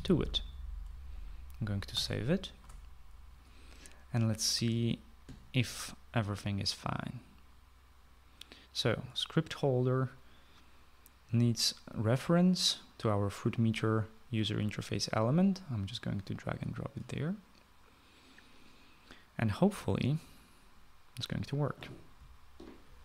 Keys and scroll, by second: 0.3 ;, 2.9 ctrl+s.